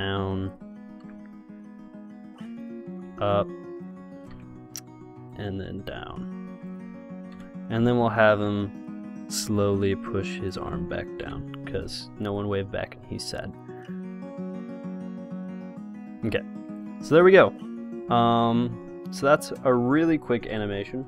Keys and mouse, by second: 0.7 click, 1.3 i, 2.8-4.8 drag, 3.3 r, 4.6 i, 5.6-7.5 drag, 6.0 r, 7.6 i, 9.0 click, 9.5 r, 11.4 i, 13.1-15.0 drag, 17.0-21.0 drag.